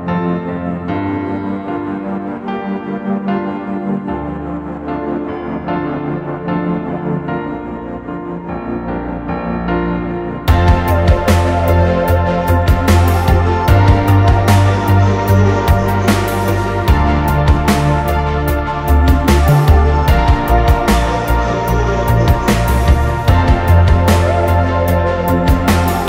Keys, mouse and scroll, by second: 2.4 double click, 2.5 right click, 3.3 double click, 5.5 double click, 5.9 shift+click, 6.6 Delete, 6.9 middle click, 7.3 scroll up 1, 7.6 middle click, 8.1 typing, 12.7-14.9 typing, 14.6 scroll up 1, 15.7 double click, 17.0 space, 17.2 middle click, 18.1-18.9 typing, 18.8 scroll down 1, 20.2 Return, 20.8 scroll down 1, 20.9 space, 21.3 scroll down 1, 21.8 middle click, 22.2-22.7 scroll up 1, 22.7 m, 24.0 scroll down 1.